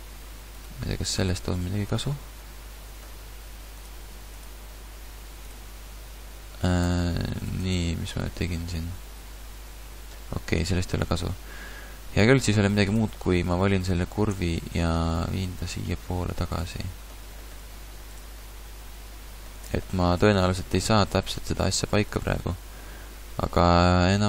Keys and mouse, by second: 7.8 ctrl+z, 8.1 ctrl+z, 8.4 ctrl+z, 8.8 ctrl+z, 9.2 ctrl+z, 14.3 Tab, 15.2 g, 17.3 g, 20.0 g, 21.4 g.